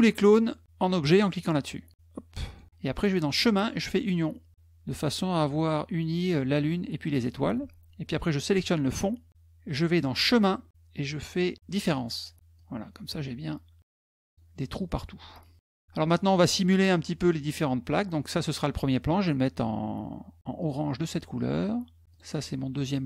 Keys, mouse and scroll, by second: 1.7 click, 2.2 click, 3.1 click, 4.3 click, 4.9 click, 8.7 shift+click, 9.9 click, 11.6 click, 12.3-14.1 drag, 17.1-18.3 drag, 20.4 click, 22.2 click.